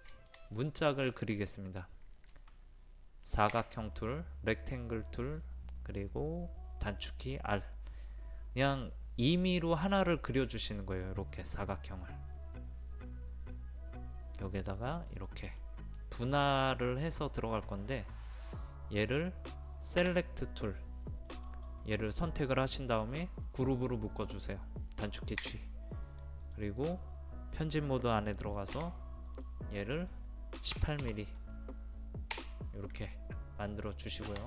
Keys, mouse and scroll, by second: 0.6 middle click, 3.5 r, 5.2 click, 15.5 middle click, 20.1 space, 21.3 click, 25.4 a, 26.5 click, 28.8 p, 29.3 click, 30.8 KP_1, 31.0 KP_8, 33.4 middle click.